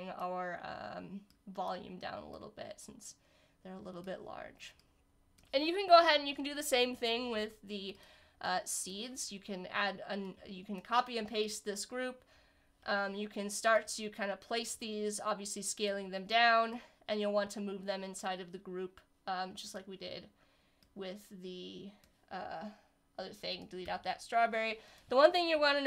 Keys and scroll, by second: 12.3 super+c, 12.8 super+f, 23.8 BackSpace.